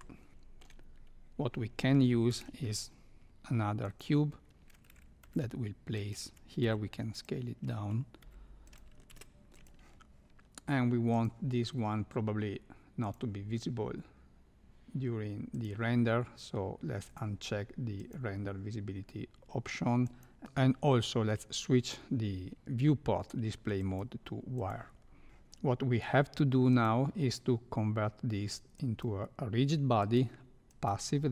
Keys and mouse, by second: 0.3-0.6 shift+middle drag, 2.3 shift+a, 5.2 g, 6.6 s, 8.2 g, 9.0 ctrl+a, 13.0 click, 15.6 drag, 17.0 click, 18.0 click, 20.2 click, 23.8 click, 25.3 shift+Left, 26.7 click, 28.7 click, 30.1-30.9 drag.